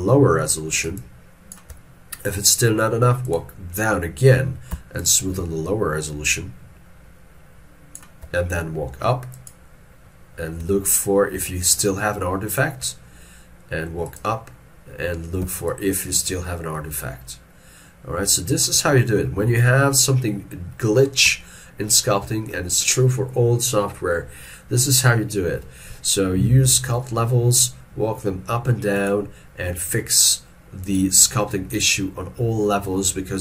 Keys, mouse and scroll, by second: 1.0 shift+click, 5.0 shift+click, 10.9 shift+click, 15.7 shift+click, 19.0 scroll down 1, 21.5 ctrl+middle click, 22.4 shift+middle click.